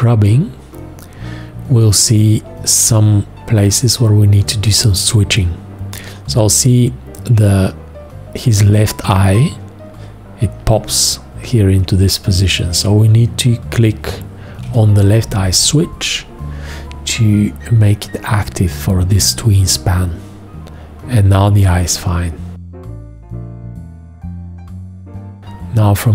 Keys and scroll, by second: 14.6 g.